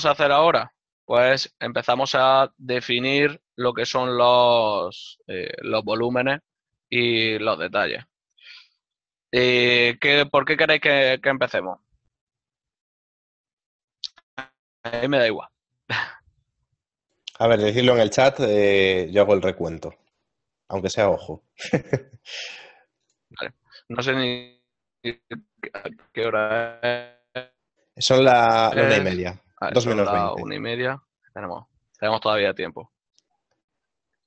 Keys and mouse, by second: 0.7 l, 7.0 ctrl+middle click.